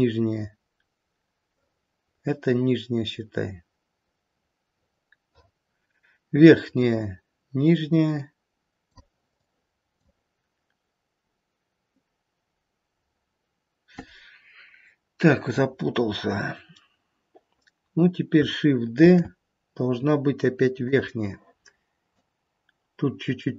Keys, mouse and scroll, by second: 9.2 click, 19.1 shift+d, 22.2 click.